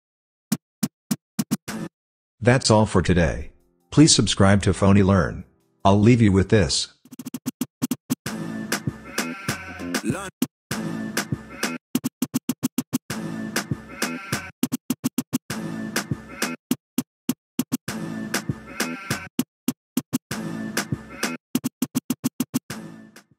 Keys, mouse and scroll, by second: 0.0-2.2 typing, 6.9-8.7 typing, 10.2-23.2 typing.